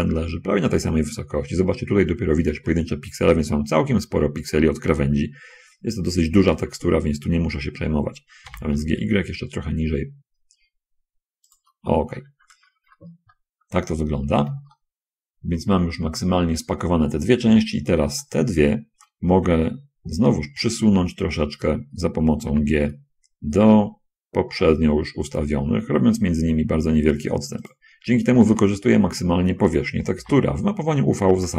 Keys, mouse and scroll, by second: 0.1 shift+middle click, 1.5 middle click, 8.8 g, 9.1 y, 11.8 shift+click, 12.5-13.5 shift+scroll down 2, 13.5 middle click, 15.1-16.1 shift+middle drag, 18.4 shift+middle click, 20.5 l, 21.1 middle click, 22.8 g, 27.7 click, 28.5 scroll up 1, 28.9 shift+click, 29.0 shift+middle click, 30.4 l.